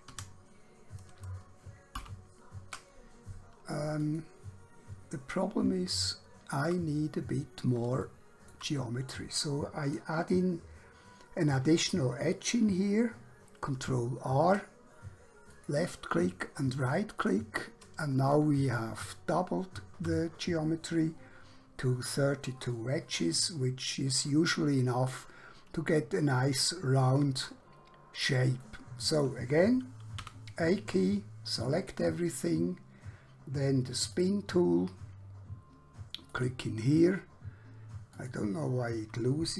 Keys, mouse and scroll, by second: 2.0 ctrl+z, 4.1 click, 5.3-5.7 scroll up 1, 6.0 shift+middle click, 7.2 scroll up 1, 8.1 shift+middle click, 13.7 ctrl+r, 15.5 click, 16.5 right click, 17.3 click, 18.8 shift+middle click, 27.7 scroll down 1, 28.7 shift+middle click, 30.1 a, 34.1 click.